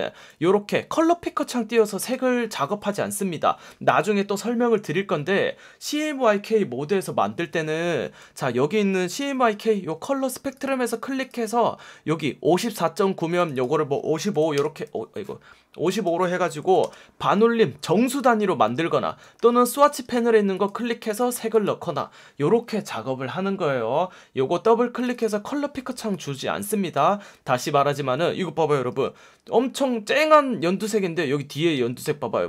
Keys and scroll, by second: 9.1 F1, 10.1 F1, 11.8 F1, 13.1 F1, 14.3 5, 14.5 Return, 16.5 5, 16.8 Return, 19.3 F1, 20.0 F1, 28.8 F1, 31.7 F1.